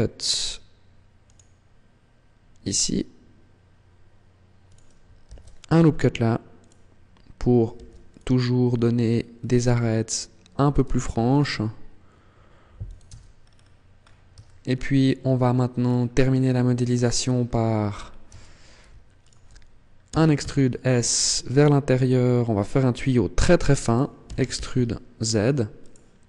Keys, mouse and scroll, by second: 4.4 click, 5.0 ctrl+r, 6.5 click, 7.6 ctrl+r, 9.3 click, 10.8 ctrl+r, 12.8 click, 12.9 Tab, 13.2 scroll down 4, 13.8 scroll up 3, 14.2 shift+middle click, 15.6-16.3 scroll down 6, 17.0-17.6 scroll up 2, 17.6-18.0 scroll up 4, 18.0 Tab, 19.0 alt+right click, 20.0 e, 23.7 click, 24.0 e, 25.8 click.